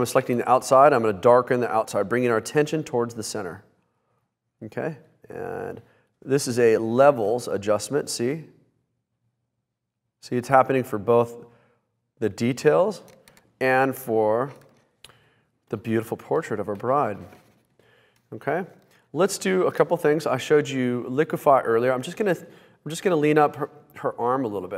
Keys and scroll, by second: 0.0 shift+super+i, 14.8 b, 18.9 space.